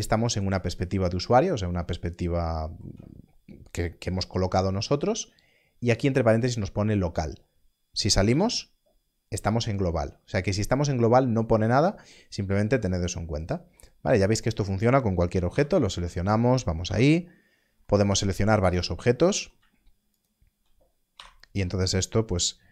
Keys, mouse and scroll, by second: 8.2 KP_Divide, 8.5 /, 12.8 /, 12.9-13.7 scroll down 1, 14.4 click, 16.8 /, 16.8 /, 18.7 click, 20.1 shift+click, 22.4 KP_Divide.